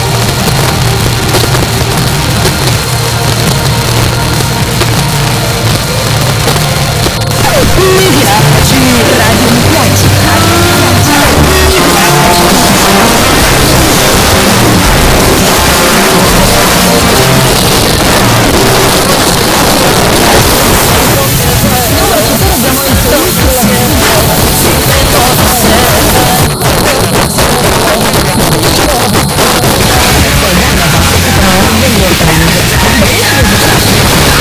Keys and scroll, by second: 17.4 Page_Down, 26.4 Page_Down.